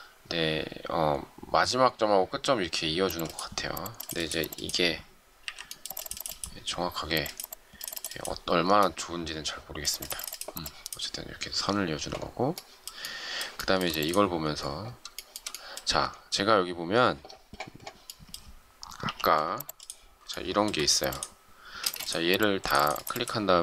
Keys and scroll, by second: 5.4 Delete, 19.0 m, 21.7 space.